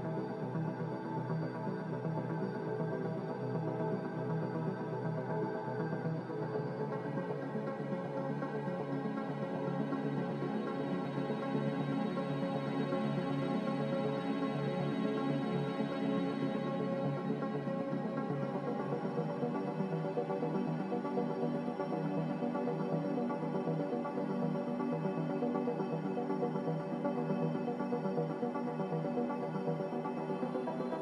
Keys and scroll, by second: 3.9-5.7 typing, 16.7-17.7 typing, 24.5-25.5 typing.